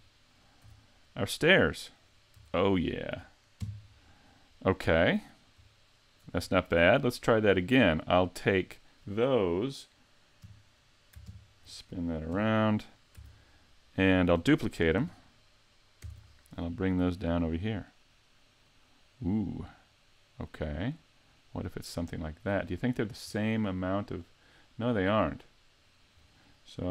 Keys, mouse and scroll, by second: 0.6 z, 1.0 middle click, 2.3 a, 3.6 KP_5, 4.4 scroll down 1, 4.5-5.5 scroll up 5, 5.7 shift+middle click, 6.4-6.8 scroll down 2, 6.9 middle click, 8.6 right click, 10.4 KP_3, 11.3 ctrl+KP_3, 12.3 KP_5, 13.1 z, 16.0 shift+d, 19.5 shift+d, 22.5 click, 23.3 middle click.